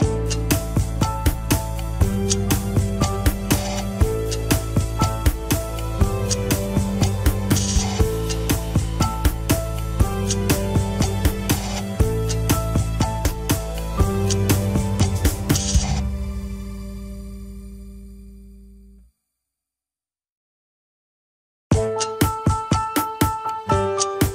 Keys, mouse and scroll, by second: 0.8 ctrl+s, 1.6 a, 1.9 alt+r, 2.1 alt+g, 2.5 ctrl+Tab, 3.2 click, 4.3-5.3 drag, 6.0 ctrl+p, 6.7 Down, 6.9 Down, 8.0 KP_1, 8.2-8.9 scroll down 2, 8.9 scroll down 2, 8.9 ctrl+s, 9.1 click, 9.7 scroll up 2, 9.9 shift+middle click, 10.6 ctrl+Tab, 10.9 click, 11.5-12.1 scroll down 1, 12.1 r, 14.5-15.0 middle drag, 15.0-15.4 scroll down 6, 15.1 KP_1, 15.6 a, 16.1 alt+r, 16.4 alt+g, 16.8 click, 16.9 shift+middle drag, 17.2-17.8 scroll down 2, 17.8 drag, 18.3 g, 19.3-19.8 scroll up 3, 19.8-20.2 drag, 20.4 g, 22.8 click, 23.8 shift+click.